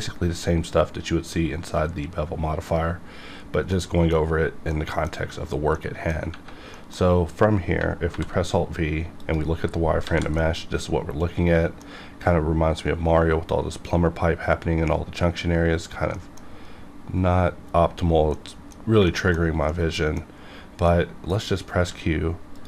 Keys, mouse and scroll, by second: 3.9-6.3 middle drag, 6.5 scroll down 1, 6.7 middle click, 8.1 alt+v, 9.2 click, 10.0 alt+a, 10.4-11.9 middle drag, 11.9 scroll up 1, 16.1 middle click, 16.4 scroll up 1, 17.7 scroll down 1, 18.3 middle click, 19.4-19.7 shift+scroll down 2, 19.7 middle click, 20.1-20.9 scroll down 2, 20.9 middle click, 21.8 q, 22.5 click.